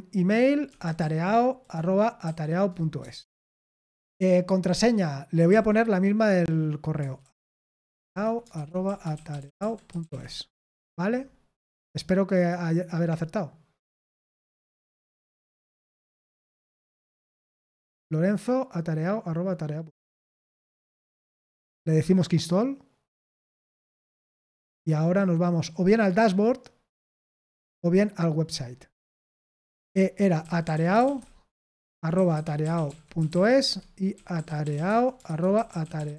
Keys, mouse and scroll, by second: 0.4-1.4 typing, 1.7 Down, 2.2 Down, 3.0 Return, 3.5 Tab, 5.4 typing, 6.9-10.0 typing, 12.3 click, 22.2 click, 24.3 click, 30.4-36.1 typing, 33.6 Tab.